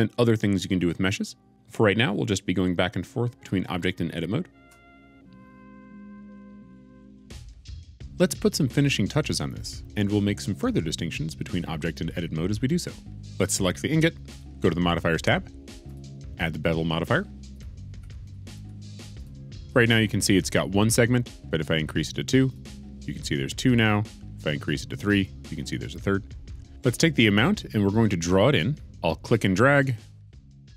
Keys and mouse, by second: 14.3 click, 15.8 click, 17.4-19.2 drag, 25.1 click, 29.8 click.